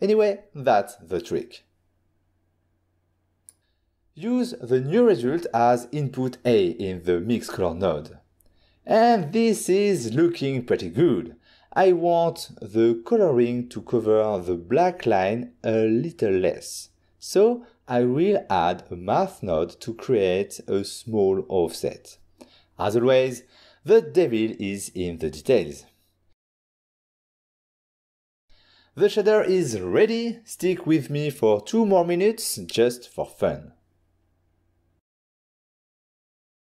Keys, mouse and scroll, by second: 3.3 click, 6.3 click, 6.8 ctrl+shift+click, 9.9 ctrl+shift+click, 12.7 ctrl+shift+click, 12.9 middle click, 14.7 ctrl+middle click, 17.4-18.4 typing, 17.5 click, 19.1 Return, 20.1 click, 20.9 middle click, 21.4 middle click, 22.9 shift+click, 28.0 ctrl+middle click, 30.8 ctrl+shift+click.